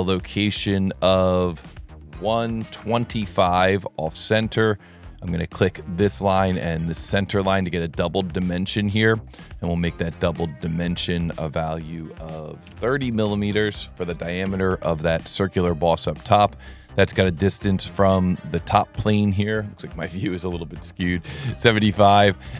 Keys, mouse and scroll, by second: 0.8 click, 1.4 click, 5.7 click, 6.6 click, 7.2 click, 11.1 click, 16.3 click, 18.5 click, 19.2 click.